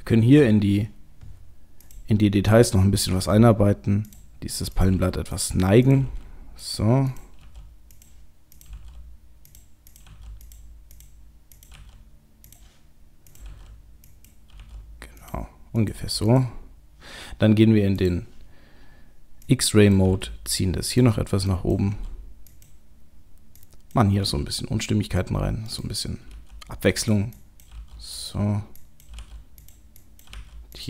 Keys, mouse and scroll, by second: 1.8 click, 3.0 g, 4.8 click, 5.9 click, 5.9 g, 6.0 g, 7.1 click, 7.4 g, 8.6 click, 8.7 g, 9.9 click, 10.1 g, 11.0 click, 11.6 click, 11.7 g, 13.3 click, 13.4 g, 14.4 g, 15.8 click, 16.0 g, 18.0 click, 19.5 click, 20.1 g, 21.5 click, 21.8 g, 23.6 click, 24.2 g, 26.3 g, 27.4 click, 27.7 g, 28.8 click, 29.1 g, 29.9 click, 30.3 g.